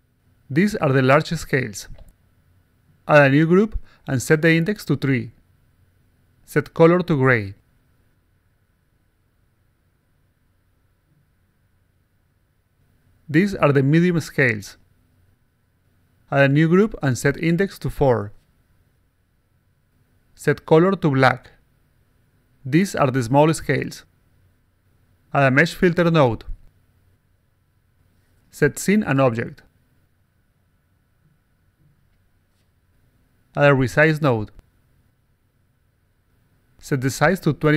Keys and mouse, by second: 0.8 a, 1.4 r, 1.8 g, 3.0 click, 3.8 click, 4.2 click, 4.8 click, 5.1 click, 5.7 click, 6.8 click, 7.4 0, 7.8 5, 11.0 click, 12.0 5, 13.2 click, 13.2-14.8 typing, 15.0 click, 16.3 click, 17.3 click, 17.8 click, 18.6 click, 19.4 4, 20.3 click, 21.2 click, 22.1 click, 22.4-24.0 typing, 25.0 click, 26.1 click, 27.0 click, 28.6 click, 29.2 click, 29.8 click, 30.5 click, 31.5 alt+click, 32.8 click, 34.0 click, 35.1 click, 36.5 click, 36.8-37.7 typing.